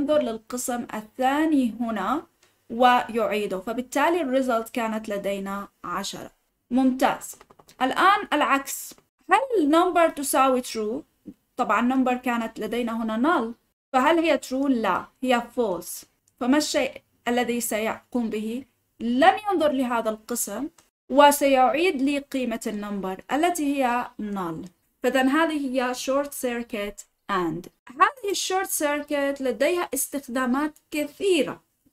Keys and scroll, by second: 7.0 ctrl+z.